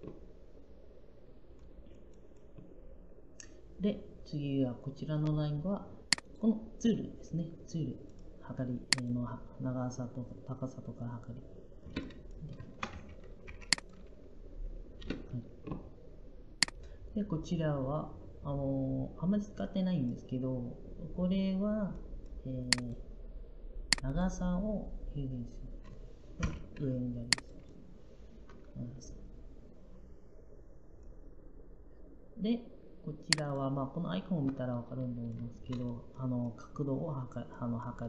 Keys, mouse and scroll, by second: 12.8-13.8 typing.